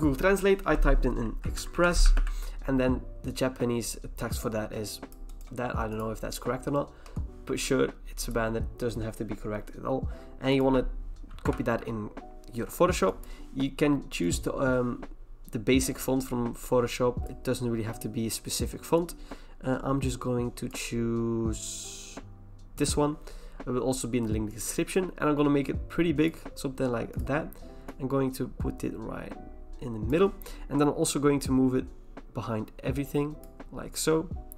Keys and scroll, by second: 1.0-2.6 typing, 7.0-7.8 typing, 11.5 ctrl+v.